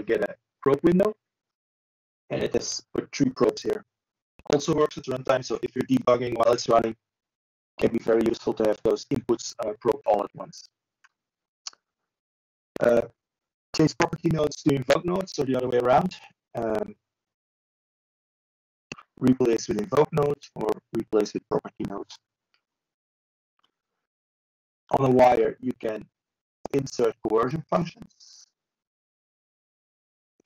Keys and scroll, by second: 27.1 ctrl+z.